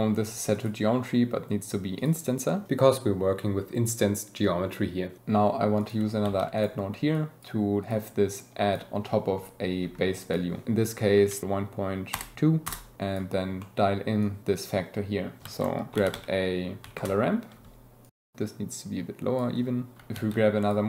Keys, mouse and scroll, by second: 0.5-2.1 drag, 5.8 click, 6.5 click, 7.1 drag, 7.8 drag, 8.3 click, 10.2-12.7 drag, 12.9 click, 13.6 click, 14.6 click, 15.4 shift+a, 18.0-19.5 shift+drag, 20.6-20.8 drag.